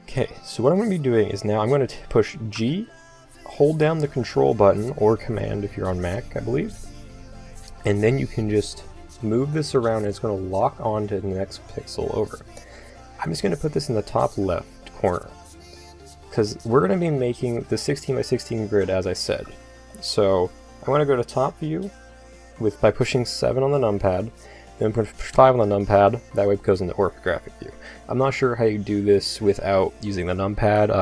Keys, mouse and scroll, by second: 2.5 g, 19.3-21.0 middle drag, 21.0 KP_7, 23.0 middle click, 23.2 KP_7, 25.3 KP_5.